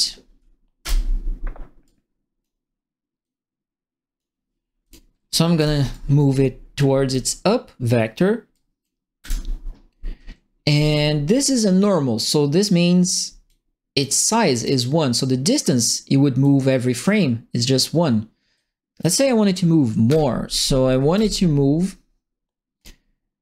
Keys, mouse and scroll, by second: 0.8 Return, 1.8 click, 3.2 click, 4.8 click, 5.5 Delete, 5.9-7.1 drag, 8.5 click, 9.2 Delete, 11.2 click, 13.4 click, 14.2 click, 16.4 click, 18.5 click, 20.0 KP_Multiply, 21.1 Return, 22.7 click.